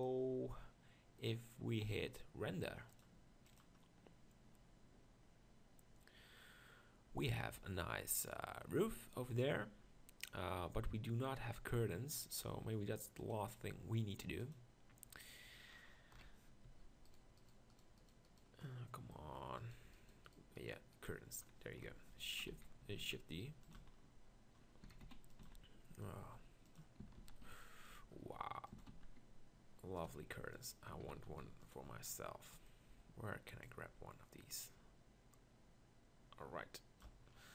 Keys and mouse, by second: 9.9 middle click, 12.2 click, 16.2 KP_1, 16.7 z, 21.8 KP_1, 22.5 z, 23.0 shift+d, 23.8 z, 24.9-28.9 typing, 30.2 g, 31.0 s, 32.3-33.3 middle drag, 37.3-37.5 middle drag.